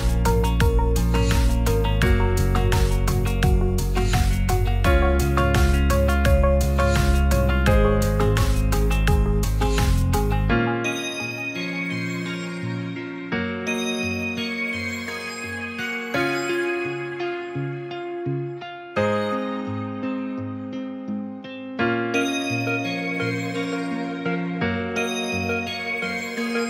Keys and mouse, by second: 0.9 click, 1.5 Tab, 1.5 click, 2.1 Tab, 2.6 click, 4.5 click, 5.2 click, 5.6 middle click, 11.6 ctrl+click, 13.2 click, 15.4 click, 17.2 click, 17.9 Tab, 21.1 ctrl+Tab, 21.5 click, 22.1 click, 24.9-26.6 middle drag.